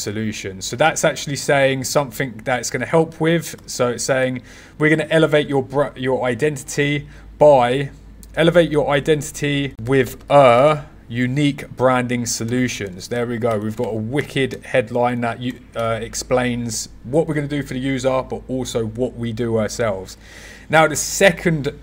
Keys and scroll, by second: 14.1 o, 14.4 Left, 15.4 BackSpace, 15.7 w.